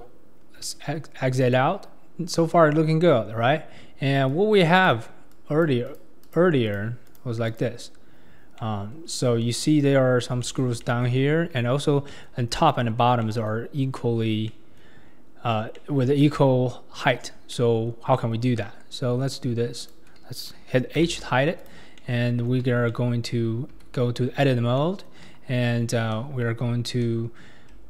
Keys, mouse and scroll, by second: 0.0 Tab, 0.3 scroll down 3, 0.6-1.6 middle drag, 1.6-2.6 scroll up 3, 4.3 click, 5.3 click, 6.2 click, 7.1 click, 7.5 click, 8.6-9.1 middle drag, 9.1 scroll up 4, 9.4-9.9 middle drag, 9.9-10.4 scroll down 3, 10.4-10.8 shift+middle drag, 10.8 scroll up 1, 10.8-18.6 middle drag, 18.6 KP_1, 19.1-19.8 scroll down 3, 19.8 click, 21.0 h, 21.6 click, 22.0-23.8 middle drag, 23.8 Tab, 24.8 middle click, 25.2 KP_1, 26.1 KP_3, 27.0 ctrl+KP_3.